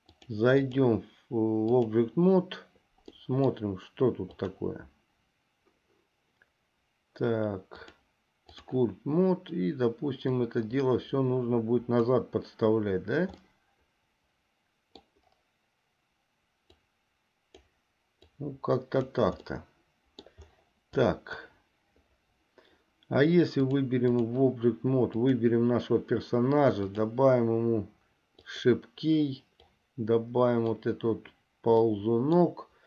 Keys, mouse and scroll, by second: 0.4 click, 0.7-2.2 drag, 3.3 middle click, 4.6 click, 7.9-8.9 drag, 10.5-12.4 drag, 13.6-15.3 middle drag, 16.9 click, 18.5 click, 19.7 middle click, 23.7 click, 25.4 click, 27.0 click, 28.5 click, 29.8-31.0 drag, 32.0 middle click.